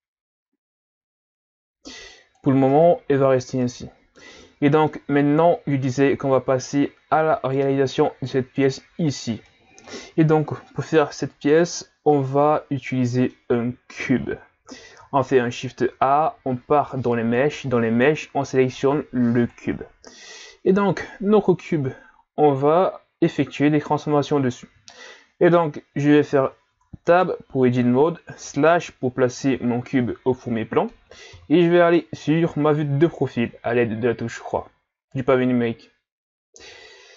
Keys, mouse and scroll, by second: 2.7 Tab, 3.0 a, 3.2-3.6 scroll down 6, 3.6-6.6 middle drag, 9.5-15.1 middle drag, 15.2 shift+a, 26.7 Tab, 28.4 KP_Divide, 31.3 KP_3, 36.7-37.1 scroll down 5.